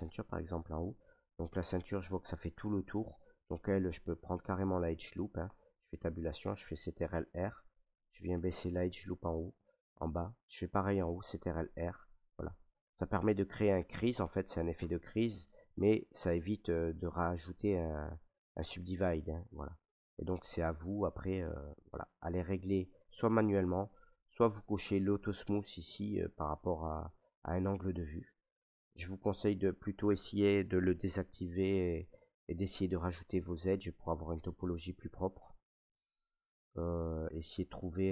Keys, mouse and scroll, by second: 0.1 shift+middle click, 0.3 middle click, 0.3 middle click, 0.5 shift+middle click, 0.7 middle click, 0.8 middle click, 1.8 middle click, 2.7-3.3 scroll, 4.1 scroll, 5.1 middle click, 5.1 right click, 5.4 Tab, 7.0 ctrl+r, 7.6 click, 9.1 click, 10.9 ctrl+r, 11.5 click, 13.0 click, 14.7 Tab, 16.1 middle click, 16.1 scroll, 17.5-17.9 scroll, 18.3 middle click, 18.7 middle click, 19.5 middle click, 20.2 shift+middle click, 20.4 shift+middle click, 20.8 middle click, 21.6 middle click, 22.6 middle click, 24.2 click, 24.9 middle click, 25.0 middle click, 25.1 shift+middle click, 25.2 scroll down 1, 25.8 middle click, 28.1 click, 28.8-32.6 drag, 32.6-38.0 middle drag, 38.0 scroll.